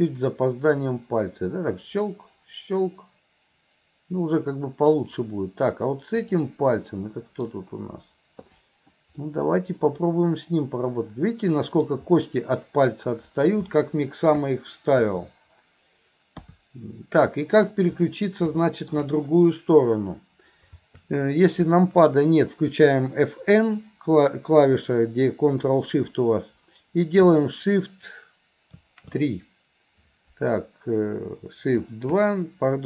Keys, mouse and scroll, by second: 6.2 click, 7.0-8.5 middle drag, 8.5 click, 18.7 middle drag.